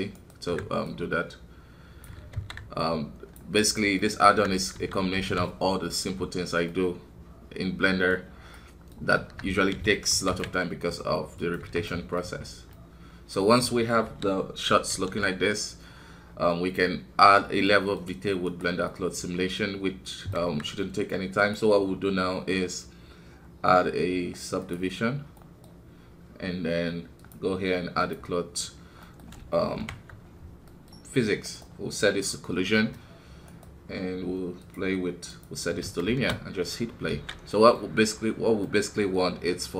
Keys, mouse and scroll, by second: 0.8-2.3 drag, 2.3 alt+KP_2, 2.8-4.0 drag, 4.0 middle click, 4.2 Tab, 4.6 scroll down 1, 4.7 KP_1, 5.2 alt+a, 6.6-8.2 middle drag, 8.2-8.5 scroll up 1, 8.9 middle click, 8.9 scroll up 1, 9.1 Tab, 11.8 middle click, 12.4-12.7 scroll down 2, 12.7-14.0 middle drag, 14.0 KP_1, 17.2-17.6 scroll down 3, 17.6 middle click, 18.0 scroll up 2, 18.4 right click, 19.0-20.4 middle drag, 20.4 KP_1, 21.4-24.6 drag, 25.3-28.0 middle drag, 28.0-29.0 drag, 29.0 middle click, 29.8 shift+Left, 30.6-36.0 middle drag, 36.0 shift+space, 37.2 alt+a, 37.6 middle click, 37.9-38.6 scroll up 2, 38.6-39.7 middle drag.